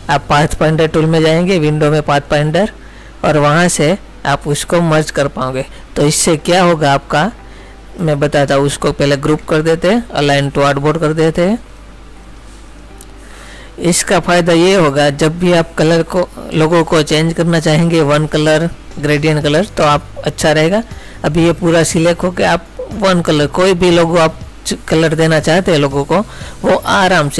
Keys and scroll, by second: 9.3 ctrl+g, 16.2 ctrl++, 16.8 space.